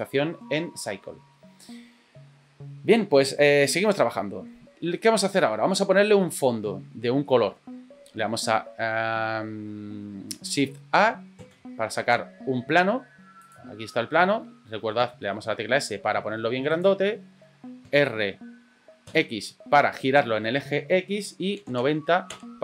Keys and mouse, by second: 3.5-4.5 middle drag, 7.2-7.5 middle drag, 11.4 shift+a, 15.0 s, 18.0 r.